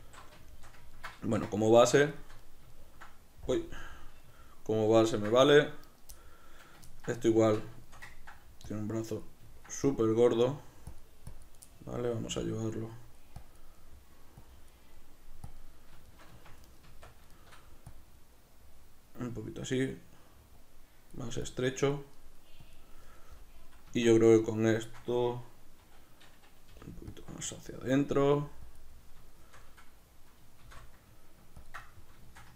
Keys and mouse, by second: 0.5 shift+middle click, 1.7-7.1 middle drag, 1.7 b, 1.9 Tab, 3.5 KP_Decimal, 7.1 right click, 7.3 Tab, 7.6 b, 7.8 ctrl+shift+middle click, 8.7 click, 9.5 ctrl+middle click, 9.9 click, 11.6 middle click, 12.4 click, 12.9 middle click, 13.4 click, 13.8 middle click, 14.4 click, 15.0 middle click, 15.5 click, 16.1 shift+middle click, 16.3 b, 16.4 Tab, 16.6 right click, 16.8 Tab, 17.0 b, 17.3 shift+middle click, 17.9 click, 18.4-20.6 middle drag, 20.6 click, 22.2 middle click, 22.6 click, 22.9-24.2 middle drag, 23.9 b, 24.0 Tab, 24.2 right click, 24.8-27.2 shift+middle drag, 26.7 g, 27.2 click, 27.7-28.8 middle drag, 28.2 g, 28.8 click, 28.9-31.7 middle drag, 30.6 shift+d, 31.7 ctrl+click, 31.8-32.5 middle drag.